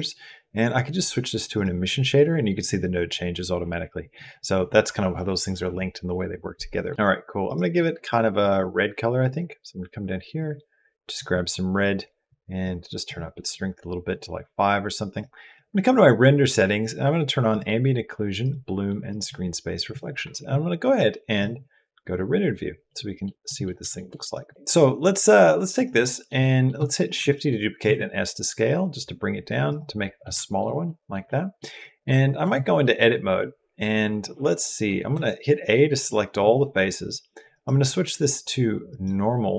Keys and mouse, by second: 12.4 click, 14.9 click, 17.3 click, 18.2 click, 18.9 click, 22.7 click, 23.3 middle click, 23.8 shift+middle click, 24.3 middle click, 24.3 click, 24.8 click, 25.8 click, 26.2 click, 27.0 shift+d, 29.8 click, 30.3 shift+click, 30.7 click, 31.1 click, 31.6 click, 32.2 Tab, 32.6 click, 35.0 a, 35.3 click, 37.3-39.2 drag.